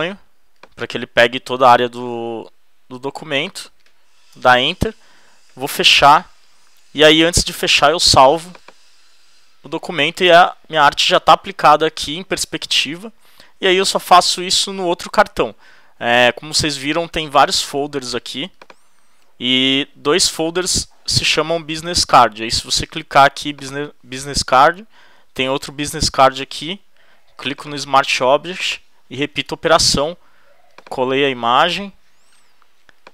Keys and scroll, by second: 4.3 alt+shift+Return, 5.3 super+w, 29.9 super+v, 31.7 super+t, 32.6 shift+super+t.